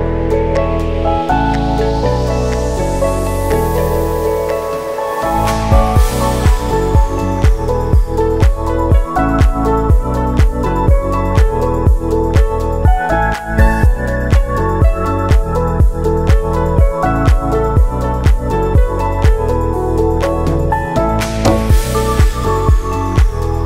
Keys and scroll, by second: 18.0 ctrl+c, 18.2 ctrl+v, 19.0 ctrl+c, 19.2 ctrl+v, 23.0 ctrl+c, 23.2 ctrl+v.